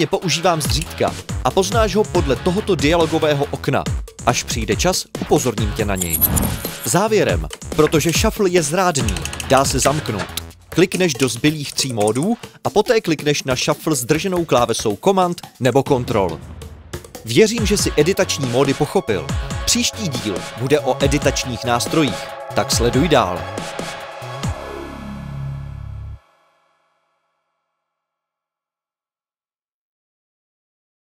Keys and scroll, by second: 11.0 F1, 11.2 F1, 11.4 F1, 11.6 F1, 11.8 F1, 12.0 F1, 12.1 F1, 14.0-15.6 typing, 17.6 ⟲, 20.2 Home, 23.4 ctrl+alt+super+c, 23.9 typing, 24.2 alt+f.